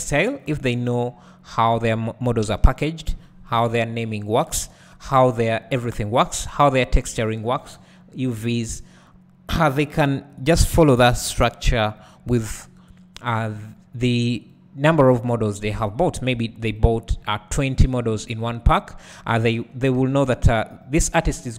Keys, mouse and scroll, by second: 3.5 KP_3, 4.8 KP_1, 5.5 scroll down 1, 6.5 r, 7.7 click, 8.1-8.8 scroll up 1, 8.8 g, 9.8 click, 11.0 g, 12.0 click, 12.4-12.9 scroll down 1, 12.9-13.7 scroll up 1, 13.7 g, 14.5 click, 15.7 g, 16.1 click, 17.3 g, 18.8 g, 19.6 right click, 20.6 `, 21.4-21.5 scroll down 1.